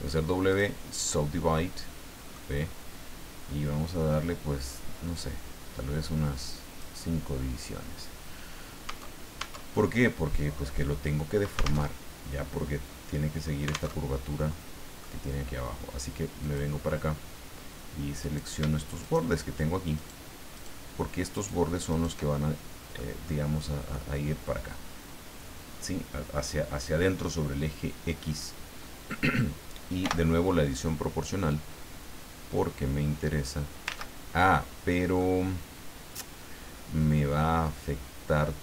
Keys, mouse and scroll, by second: 0.5 click, 1.5 middle click, 4.1-7.0 drag, 8.9 Tab, 9.7 middle click, 11.8 alt+Tab, 13.9 alt+Tab, 14.4 middle click, 16.4 click, 16.9 scroll up 2, 18.2 right click, 19.0 shift+right click, 20.0 shift+right click, 20.5 shift+right click, 21.3 shift+right click, 21.9 shift+right click, 22.3 shift+middle click, 23.2 middle click, 30.0 o, 31.5-34.0 drag, 33.9 ctrl+z, 34.6-34.9 scroll down 2, 35.1-38.6 drag.